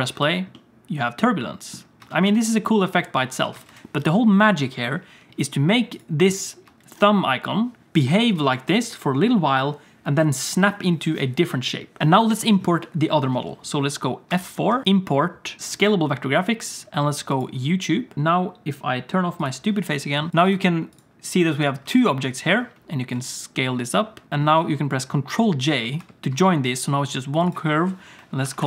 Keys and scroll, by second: 0.1 space, 2.0 space, 2.1 alt+shift+z, 2.2 space, 3.4 alt+shift+z, 3.6 space, 6.6 space, 7.9 space, 12.0 alt+a, 12.0 ctrl+s, 14.3 F4, 23.1 s, 24.2 s, 26.0 ctrl+j.